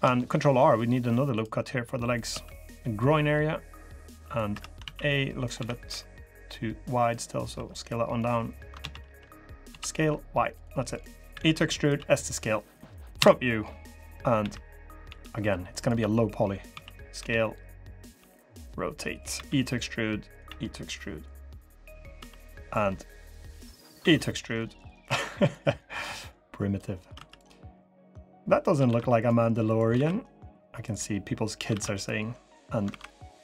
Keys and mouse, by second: 0.0 ctrl+r, 2.0 2, 2.8-4.3 drag, 4.3 3, 4.6 a, 4.8 click, 5.3 s, 7.0 drag, 7.6 3, 7.9 click, 8.6 ctrl+z, 9.4 ctrl+z, 9.4 s, 11.1 e, 11.7 s, 12.9 KP_1, 14.1-17.9 typing, 19.1 e, 20.2 e, 21.3 drag, 21.9 3, 23.5 click, 23.7 e, 24.8 2, 26.9 3, 27.8 click, 28.6 ctrl+r, 29.7 ctrl+r, 32.6 ctrl+r.